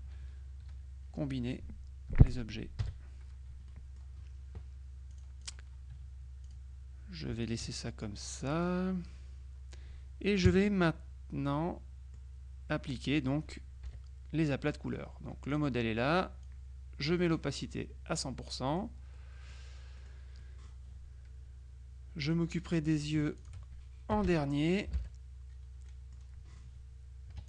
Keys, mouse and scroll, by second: 0.8 k, 1.7 k, 2.9 KP_Subtract, 3.8 click, 5.2-6.1 drag, 6.5 click, 7.5 shift+click, 10.5 KP_Subtract, 11.6-12.7 drag, 12.9 click, 13.9 KP_Subtract, 14.8 click, 15.6 click, 16.5-17.6 drag, 20.5 click, 22.3 click, 23.5 shift+click, 24.2 KP_Subtract, 25.0 Home, 25.9 middle click, 27.4 F2.